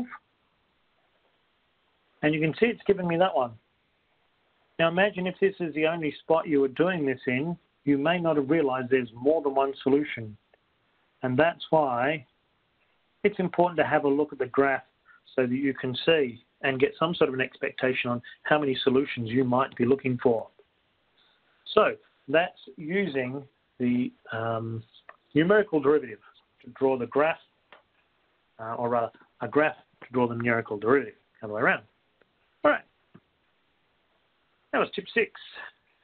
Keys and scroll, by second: 10.7-12.4 typing, 14.4-15.1 typing.